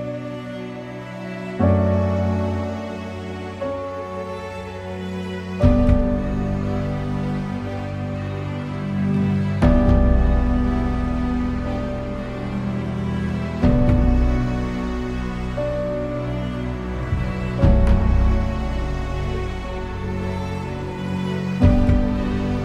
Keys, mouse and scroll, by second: 1.5-3.7 ctrl+middle drag, 3.7 Tab, 3.8 click, 4.1 middle click, 4.5 click, 4.7 Tab, 5.1-6.9 middle drag, 6.9 click, 7.4 scroll up 4, 7.7-9.4 middle drag, 9.4 a, 9.9-12.8 shift+middle drag, 12.8 alt+click, 15.1 right click, 15.4-17.3 middle drag, 17.3 a, 18.4 u, 21.3-22.6 middle drag.